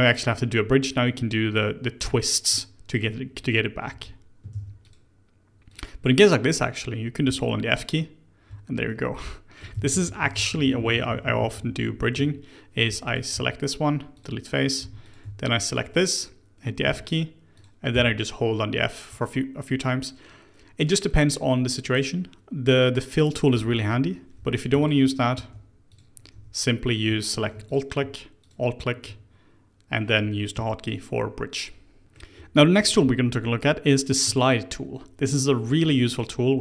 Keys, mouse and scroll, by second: 3.9 f, 4.5 ctrl+z, 4.8 click, 5.6 click, 6.0-7.2 middle drag, 7.2-8.4 f, 8.8 middle click, 9.7-11.8 ctrl+z, 11.9 ctrl+z, 12.1 ctrl+z, 12.8 3, 13.0 click, 13.3 x, 14.5 middle click, 14.7 2, 15.0 click, 15.6 shift+click, 16.8 f, 17.5 click, 17.9-19.0 f, 24.3 3, 24.8 alt+click, 25.3 x, 26.3 2, 26.8 click, 27.6 alt+click, 28.4 alt+shift+click, 32.0-34.2 middle drag, 34.2 Tab, 35.7 middle click, 36.0 click.